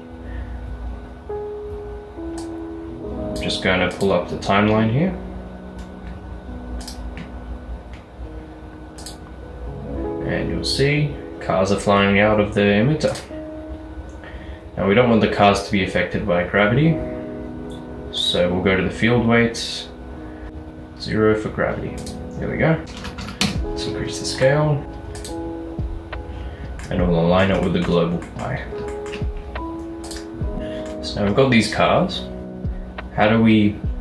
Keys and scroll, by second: 1.6-2.3 typing, 20.5 Return, 20.5 typing, 23.0 typing, 23.5 Return.